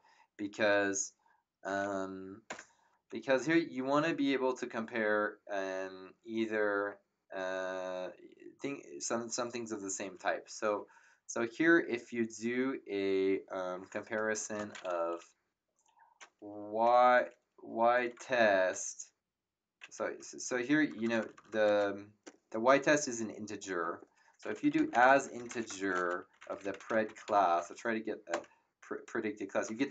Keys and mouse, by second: 2.4 Return, 2.4 KP_Enter, 16.8 y, 17.9-19.2 typing, 20.8 BackSpace, 24.5-27.7 typing, 28.3 Return, 28.3 Num_Lock.